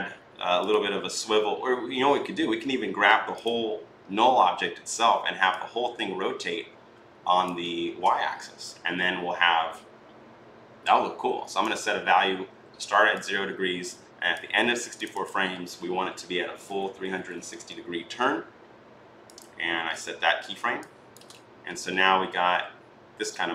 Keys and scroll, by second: 7.7 ctrl+z, 16.2-17.5 typing.